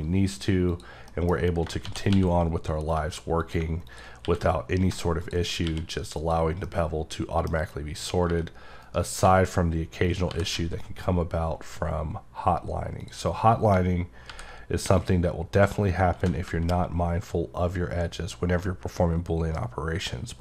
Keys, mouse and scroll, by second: 0.7 click, 1.1 middle click, 3.4 click, 3.9 click, 5.2 click, 6.2 click, 6.7 middle click, 7.6-8.3 scroll up 1, 8.8 right click, 10.0 click, 13.0 click, 15.0 click, 15.5-16.2 scroll up 1.